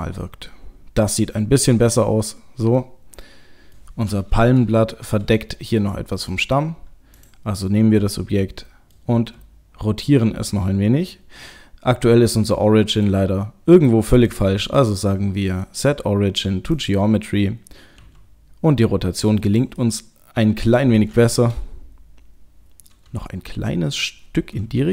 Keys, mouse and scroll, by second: 0.3 middle click, 1.9 middle click, 3.2 middle click, 4.4 KP_0, 6.3 middle click, 7.1 click, 8.1 middle click, 9.1 r, 14.8 right click, 18.0 r, 19.8 middle click, 21.3 KP_0, 23.5 middle click, 24.7 r.